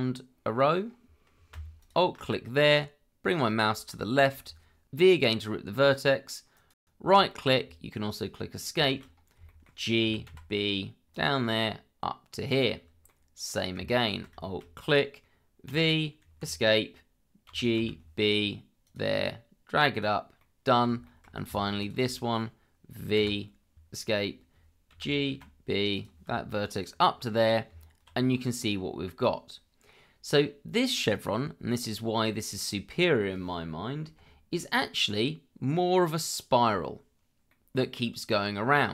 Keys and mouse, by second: 1.8 alt+click, 4.0 shift+middle click, 5.2 v, 8.8 shift+middle click, 9.4 shift+middle click, 10.0 g, 10.3 b, 11.1 click, 12.5 click, 13.1 middle click, 14.0 alt+click, 14.4 shift+middle click, 15.7 v, 16.2 Escape, 17.5 g, 17.8 b, 18.8 click, 19.9 click, 20.4 middle click, 21.0 shift+middle click, 21.8 alt+click, 23.2 v, 23.7 Escape, 24.9 g, 25.3 b, 25.9 click, 26.7 click, 27.3 middle click, 27.7 Tab, 28.6-29.8 middle drag, 30.3-33.2 middle drag, 34.0 KP_Divide, 35.2-37.4 middle drag, 37.5-38.9 middle drag.